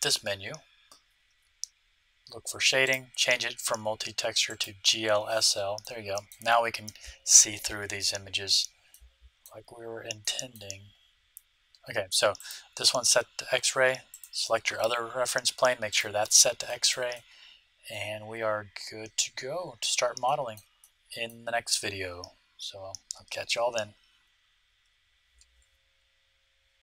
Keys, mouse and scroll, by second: 2.8-4.6 drag, 5.4-11.9 middle drag, 12.3-15.7 right drag, 15.8 right click, 15.8-17.4 drag, 16.6-18.8 middle drag, 20.2-22.6 middle drag.